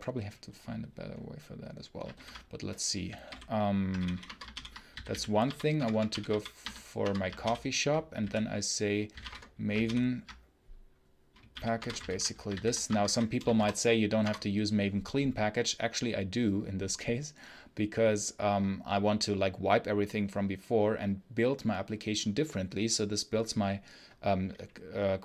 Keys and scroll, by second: 9.7 ctrl+super+l, 11.4 k, 11.6 space, 11.7 y.